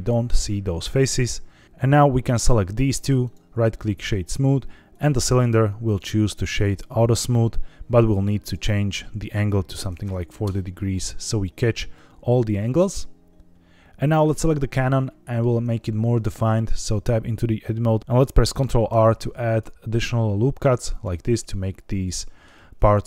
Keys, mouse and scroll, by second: 1.6 click, 2.3 click, 3.1-3.9 right drag, 4.8 click, 5.8-6.7 right drag, 8.3-10.4 drag, 14.0 click, 14.7-15.3 middle drag, 16.2 Tab, 18.0 Escape, 18.0 ctrl+z, 18.8 ctrl+r, 20.8 click, 22.0 middle click.